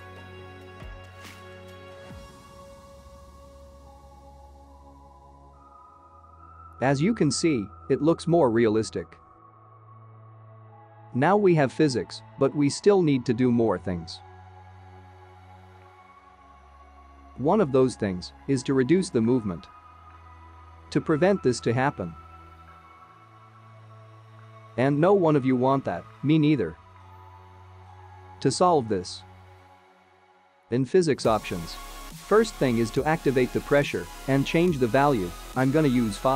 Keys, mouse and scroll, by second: 0.2 g, 0.2 middle click, 0.6 ctrl+click, 1.2 shift+click, 1.4 ctrl+Tab, 1.9 click, 2.2 click, 2.9 click, 3.1 ctrl+Tab, 3.4 click, 3.4 middle click, 3.5 scroll down 2, 3.6 space, 3.9 space, 4.0 click, 4.2 scroll down 1, 4.3 click, 4.4 click, 4.6 click, 4.8 click, 5.2 click, 5.5 click, 5.6 space, 5.9 KP_0, 10.0 click, 10.9 h, 22.0 space, 25.4 click, 28.6 click, 30.2 click, 31.4-32.5 scroll down 14, 31.6 click, 33.0-34.2 scroll down 4, 34.2 click, 35.6 click.